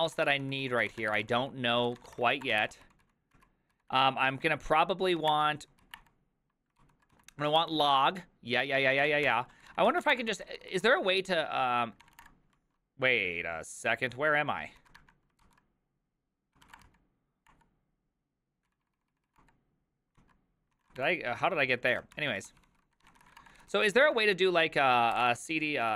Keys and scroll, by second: 0.0-10.5 typing, 10.7 ctrl+c, 11.4 ctrl+c, 11.8-12.7 typing, 14.8 ctrl+a, 15.0 1, 15.4 ctrl+c, 16.3-17.4 typing, 17.5 Return, 18.5-19.9 typing, 20.2 ctrl+o, 20.8 ctrl+a, 21.0 shift+l, 21.9 ctrl+a, 22.2-23.8 typing, 22.5 ctrl+c, 22.6 ctrl+c, 23.9 ctrl+c, 24.9-25.9 typing.